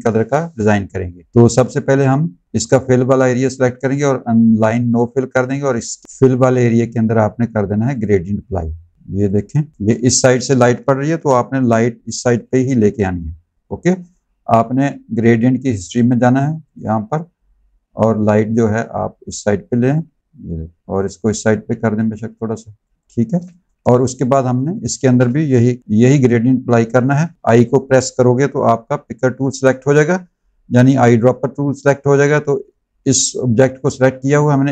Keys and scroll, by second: 9.7 space, 10.9 v, 23.3 space, 25.7 i.